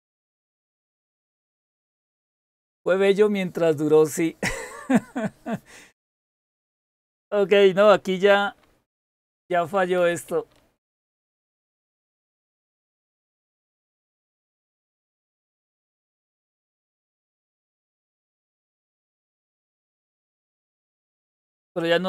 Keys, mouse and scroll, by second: 9.4-10.7 typing, 10.7 Return, 13.9 super+Return, 15.1-16.2 typing, 16.4 Return.